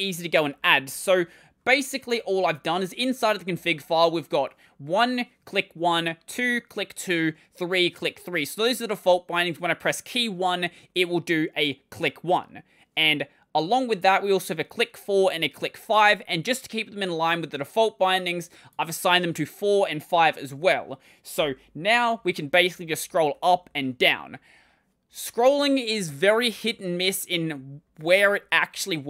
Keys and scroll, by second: 0.0-1.7 typing, 20.3 super+1, 21.2 ctrl+;, 22.0-23.7 typing, 26.4 typing.